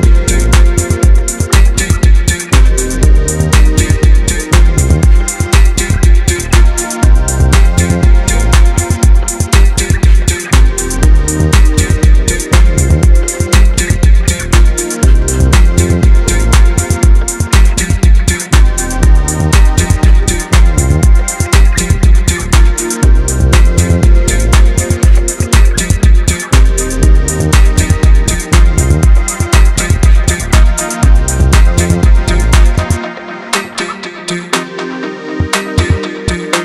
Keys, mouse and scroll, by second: 1.7 right click, 2.6 middle click, 3.6 ctrl+z, 4.4 click, 4.9-6.4 middle drag, 6.4 ctrl+shift+click, 7.0-11.1 right drag, 11.6-12.8 middle drag, 12.8 click, 14.1 ctrl+shift+click, 14.8-18.7 right drag, 19.7 click, 20.8 ctrl+shift+click, 21.4-24.8 right drag, 24.8 click, 25.5-26.5 shift+middle drag, 26.5 ctrl+shift+click, 27.1-32.0 right drag, 32.4 middle click, 33.4-34.4 scroll down 1, 34.4 click, 35.6 ctrl+shift+click, 36.2-36.6 right drag.